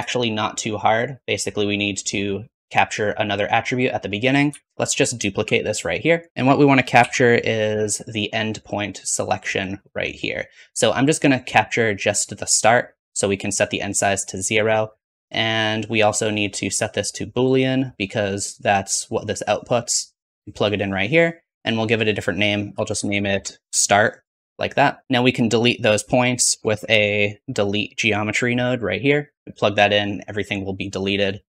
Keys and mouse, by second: 1.1-2.3 shift+drag, 3.6 shift+click, 4.1 shift+click, 4.4-6.3 typing, 8.7-13.0 drag, 13.0-16.3 middle drag, 26.2 shift+a, 29.0 middle click, 29.4-31.4 drag.